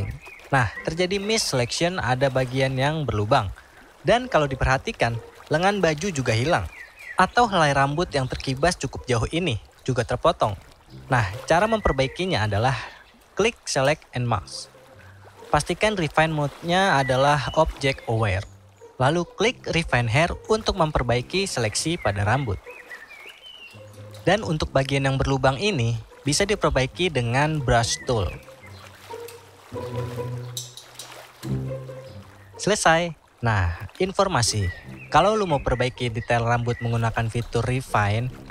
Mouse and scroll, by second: 16.4 click, 17.6 click.